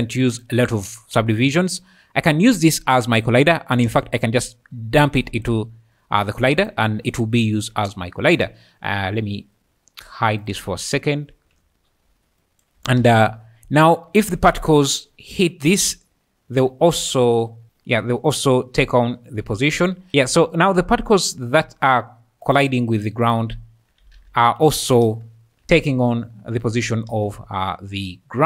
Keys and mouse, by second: 0.2 `, 0.2 q, 1.1 `, 4.4 click, 4.4 typing, 10.4 click, 13.0 space, 15.7-21.3 typing, 22.5 click, 23.5 `, 24.2 alt+a, 24.7-28.0 typing.